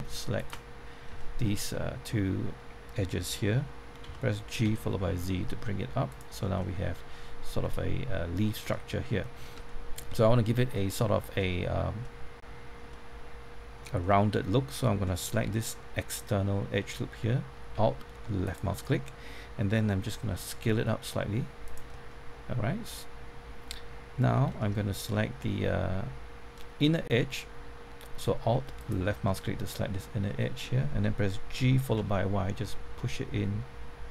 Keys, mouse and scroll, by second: 0.3 shift+click, 1.1 shift+middle click, 1.6-2.8 scroll up 1, 4.0-4.6 typing, 6.0 click, 6.3 scroll down 1, 6.5-9.5 middle drag, 9.6-15.2 shift+middle drag, 18.4 alt+click, 20.2 alt+s, 21.6 click, 21.9-24.2 middle drag, 24.3 scroll down 1, 24.4-27.2 middle drag, 28.8 alt+click, 29.2-30.2 middle drag, 31.5-31.9 typing.